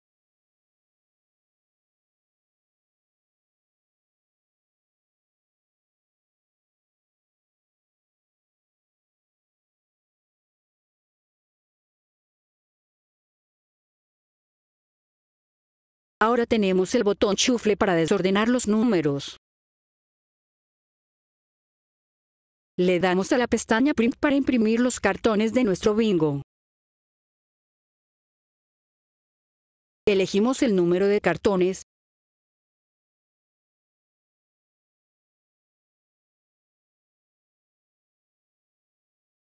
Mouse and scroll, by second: 3.3 click, 5.2 click, 9.8 click, 15.7 click, 17.9 click, 18.4 click, 18.7 click, 19.0 click, 19.2 click, 19.5 click, 19.8 click, 20.0 click, 20.2 click, 20.5 click, 20.7 click, 22.3 click, 24.9 click, 29.6 click, 32.0 click, 32.2 click, 32.4 click, 32.6 click, 37.9 click.